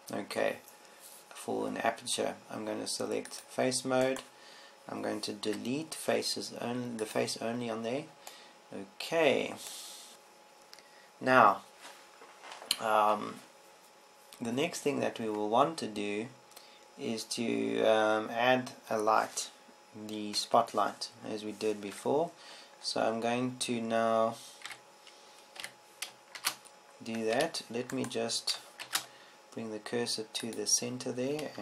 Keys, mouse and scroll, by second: 5.5-6.7 middle drag, 7.0 Delete, 8.7 Delete, 10.1 Tab, 21.9 KP_7, 22.0 KP_7, 23.5 KP_5, 26.2 z, 27.2 a, 27.9 shift+a, 30.4 shift+s.